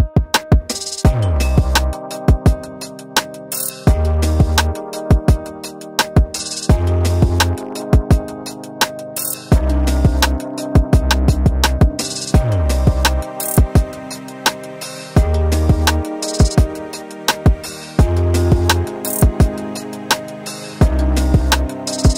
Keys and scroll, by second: 1.4 t, 7.0 e, 8.2-11.2 typing, 12.1 Return, 12.4-14.8 typing, 15.7 Return, 16.6-18.5 typing, 18.7 ctrl+a.